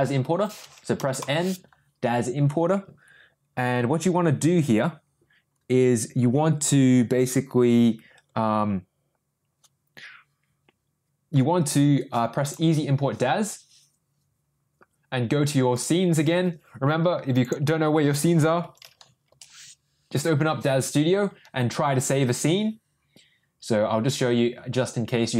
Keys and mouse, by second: 0.9 n, 1.2 n, 12.4 click.